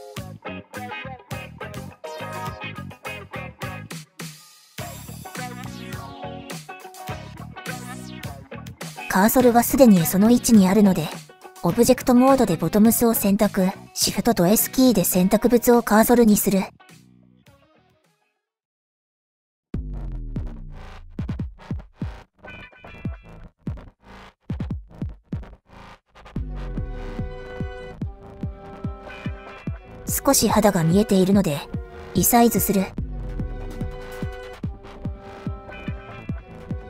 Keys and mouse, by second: 1.4-4.1 drag, 5.1 shift+click, 7.7 click, 13.4 shift+s, 26.5-27.9 middle drag, 29.1 shift+middle click, 30.2 middle click, 33.4-36.4 drag.